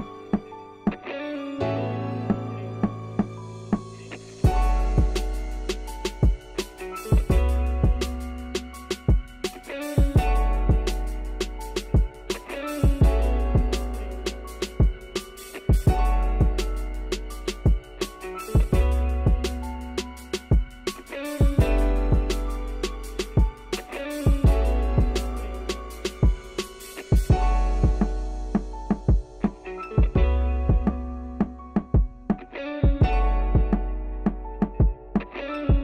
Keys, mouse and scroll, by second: 0.4 s, 1.2 shift+middle click, 2.0 KP_1, 2.4 KP_3, 2.9 Tab, 3.0 scroll up 2, 3.4-4.7 shift+middle drag, 5.0 scroll down 1, 5.1 Tab, 5.3 s, 7.2 KP_3, 7.6 Tab, 7.8-8.2 scroll up 1, 8.2 ctrl+r, 13.6-14.0 scroll up 1, 14.0 ctrl+r, 16.0 shift+middle click, 16.6-17.1 scroll up 1, 17.1 g, 18.5 ctrl+r, 22.3 click, 22.6 a, 22.7 a, 23.0 b, 23.5 g, 25.3 scroll up 1, 25.6-26.9 typing, 25.9 shift+middle click, 28.6-29.2 scroll down 3, 28.8 middle click, 29.2 Tab, 29.3 middle click, 29.8 Tab, 30.4 click, 30.6-31.9 shift+middle drag, 31.9 click, 32.2 3, 32.3 click, 32.4-33.8 middle drag, 33.8 shift+click, 34.4 middle click, 34.8 x, 35.4 middle click, 35.7 click.